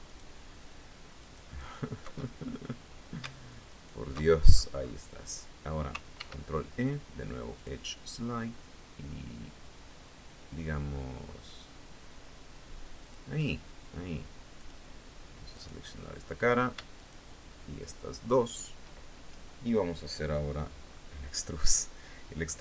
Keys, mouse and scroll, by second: 0.7 alt+shift+right click, 1.9-2.5 alt+shift+scroll up 3, 3.3 alt+shift+right click, 3.8-4.6 scroll down 2, 5.7 ctrl+e, 7.1 click, 12.6 click, 14.1 click, 15.1 right click, 16.5 shift+right click, 17.7 shift+right click, 20.3-20.7 scroll down 2, 20.9 middle click, 22.3 e.